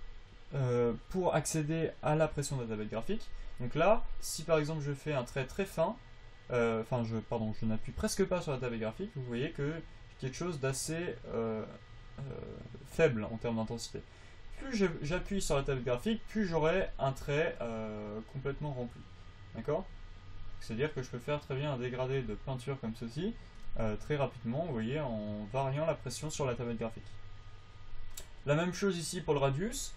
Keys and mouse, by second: 3.5-7.7 drag, 7.7-23.4 right drag, 24.6-28.7 drag.